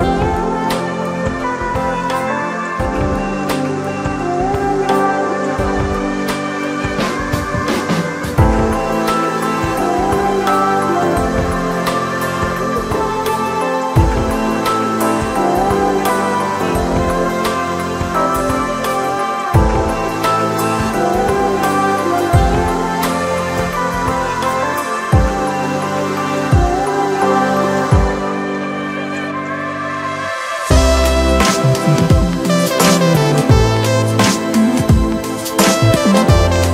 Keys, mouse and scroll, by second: 0.5 scroll up 2, 0.8 middle click, 1.7 shift+click, 1.9 shift+click, 2.8 shift+click, 2.9 shift+click, 3.3-5.0 middle drag, 5.0 shift+click, 5.8-7.1 middle drag, 7.1 shift+click, 7.8-9.7 middle drag, 9.7 click, 10.2-12.5 middle drag, 12.5 shift+click, 12.7 shift+click, 13.1-15.8 middle drag, 15.8 shift+click, 15.9 shift+click, 16.6-18.0 middle drag, 18.0 shift+click, 18.9-21.2 middle drag, 21.2 shift+click, 21.4 shift+click, 21.9-26.1 middle drag, 26.6 g, 28.5 scroll down 2, 28.6-31.1 middle drag, 31.1-31.6 scroll up 2, 31.6 scroll down 2, 31.8-33.4 middle drag, 33.4 click, 34.3 KP_Divide, 34.6 KP_1, 35.2 Tab, 35.7-36.7 scroll down 2.